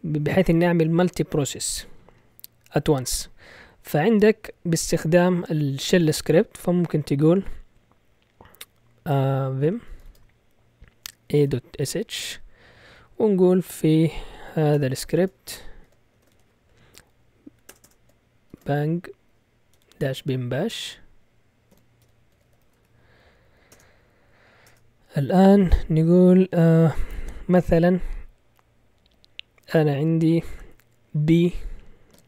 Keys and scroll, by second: 9.6-12.3 typing, 14.9-16.3 typing, 17.7-23.2 typing, 23.7 Return, 24.7 Return.